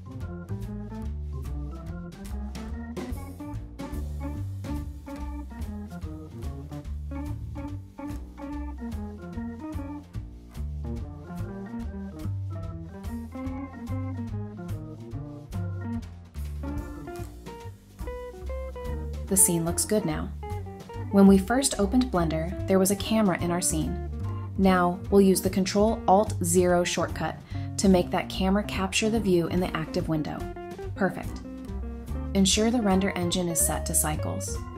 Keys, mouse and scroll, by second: 1.7-6.9 typing, 1.8 scroll up 1, 3.2 scroll up 1, 7.6 scroll down 1, 8.1-8.5 scroll up 1, 8.5 typing, 9.4 scroll up 1, 9.6-16.7 typing, 14.9 scroll up 1, 17.2-17.5 scroll down 1, 18.0-19.6 typing, 21.1 middle click, 27.8 ctrl+alt+KP_0.